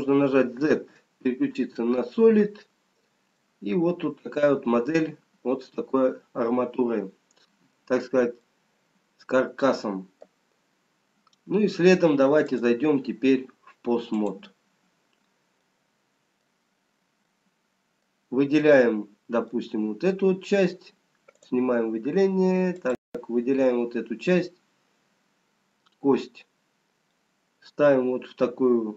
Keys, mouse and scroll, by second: 2.2 z, 3.9 middle click, 8.7 middle click, 12.6 click, 16.0 middle click, 18.5 middle click, 18.5-20.7 scroll up 1, 20.7 middle click, 22.5 click, 22.5-23.7 scroll up 2, 23.7 click, 26.1-27.3 scroll down 1, 27.3 middle click, 27.3 scroll down 2.